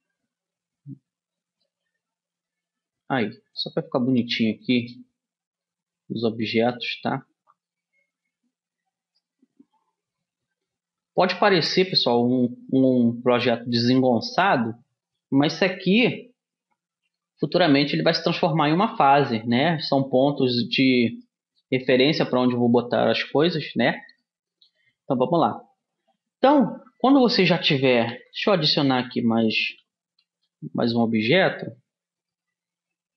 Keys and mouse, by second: 0.4-1.5 middle drag, 2.9-4.0 drag, 4.0 middle click, 5.2-6.8 right drag, 6.0 click, 7.7 middle click, 8.5 middle click, 11.7-13.3 middle drag, 13.3-14.6 drag, 14.6 right click, 16.9-27.7 middle drag, 28.5 a, 30.7 shift+a.